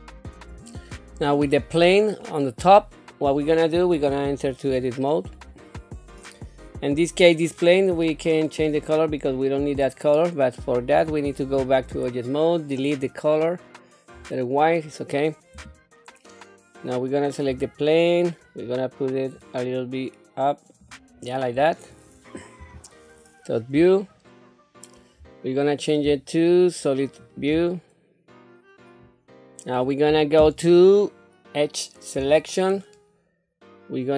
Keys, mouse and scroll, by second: 0.6 scroll up 2, 1.4 click, 2.2-3.5 middle drag, 4.7 Tab, 5.3-6.0 scroll down 2, 7.5 click, 8.7-10.0 drag, 10.9 Tab, 12.8 click, 14.1-15.5 scroll up 2, 15.5 Tab, 17.5 a, 19.3 click, 20.1 click, 21.5-22.1 scroll down 2, 22.6 KP_7, 23.9 shift+middle click, 26.0 z, 32.2 2.